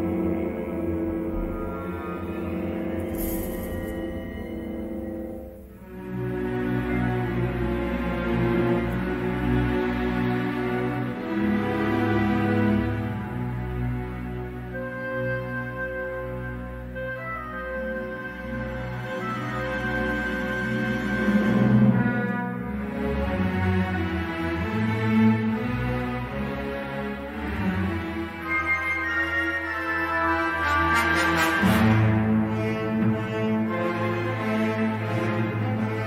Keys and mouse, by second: 0.0 ctrl+r, 1.7 ctrl+r, 4.3 3, 4.8 shift+click, 8.3 k, 24.6 2, 25.1 s, 26.4 3, 27.4 shift+click, 28.1 shift+click, 28.5 e, 29.8 s, 31.6 2, 32.2 g.